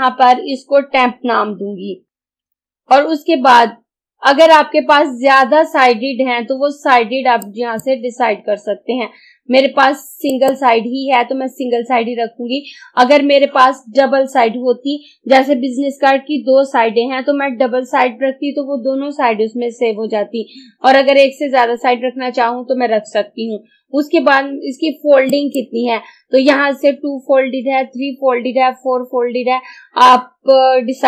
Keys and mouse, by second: 2.1 t, 2.7 p, 7.5 click, 10.3 click, 25.3 click.